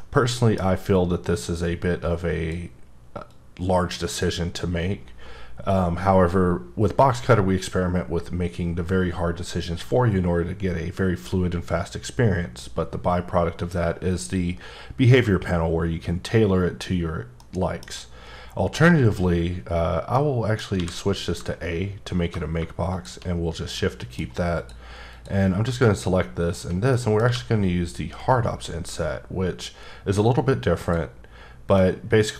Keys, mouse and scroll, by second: 0.0 middle click, 1.6 click, 3.3 click, 17.5 middle click, 20.1 middle click, 20.7 a, 22.9 shift+click, 23.7 middle click, 24.5 click, 25.1 click, 26.4 shift+click, 26.9 middle click, 27.2 q, 30.8 click, 31.7 middle click.